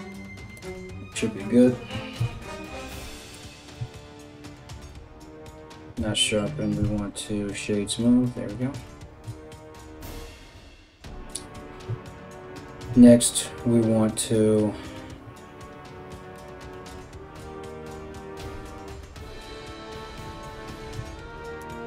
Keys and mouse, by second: 1.8 Tab, 3.3 q, 5.6 ctrl+z, 6.4 w, 9.2 KP_1, 12.4 Tab, 20.5 2, 21.2 alt+right click, 21.4-21.8 alt+middle drag.